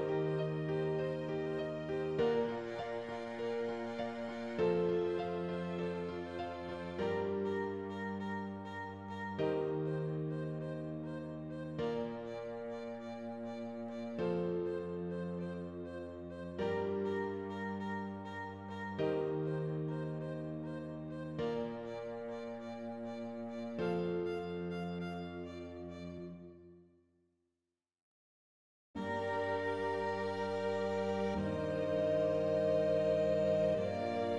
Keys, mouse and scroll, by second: 0.0 click, 0.5 g, 1.7 scroll up 2, 2.0 scroll down 2, 2.5 click, 3.1 e, 4.2 g, 9.1 click, 9.5 g, 10.5 alt+a, 10.8 l, 11.1 middle click, 11.6 scroll up 1, 11.9 middle click, 12.3-12.7 scroll down 4, 12.7 middle click, 13.2 scroll up 1, 13.5 scroll down 1, 13.8 middle click, 14.2-14.8 scroll up 1, 14.8 shift+d, 16.9 click, 17.8 scroll down 2, 18.0-19.3 middle drag, 19.3 g, 20.6 alt+a, 21.1 l, 21.5 shift+d, 23.2 shift+d, 24.5-26.0 middle drag, 26.0 g, 27.1 middle click, 28.1 scroll down 3, 28.3 alt+a, 28.7 Tab, 28.9 middle click, 29.6 click, 31.6 shift+a, 31.7 middle click, 32.5 scroll up 2, 32.8 middle click, 33.5-34.3 drag.